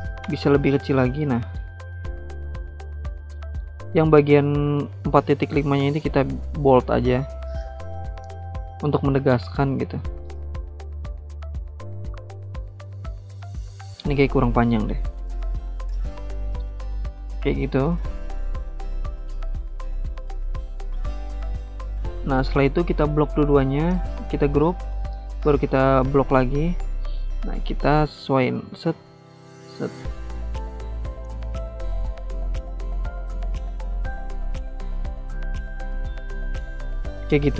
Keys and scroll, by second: 0.0 8, 0.4-2.4 Return, 24.0 ctrl+g.